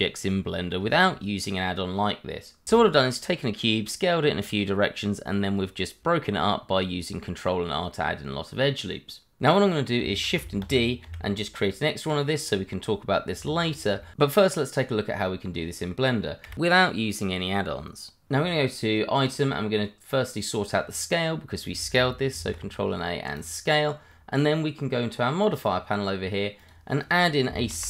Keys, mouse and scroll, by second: 0.5 s, 0.9 y, 1.2 click, 1.6-2.0 scroll down 1, 2.5 Tab, 3.5 ctrl+r, 3.7-4.5 scroll up 1, 7.0 click, 7.7 Escape, 8.0 Tab, 9.7 scroll down 1, 10.0 shift+middle click, 10.6 shift+d, 11.0 y, 12.0 click, 13.7 click, 14.0 shift+middle click, 14.1 middle click, 19.2 click, 22.3 ctrl+a, 23.3 click, 23.9 scroll down 1, 24.1 middle click, 25.4 click, 27.5 s, 27.6 i, 27.7 m.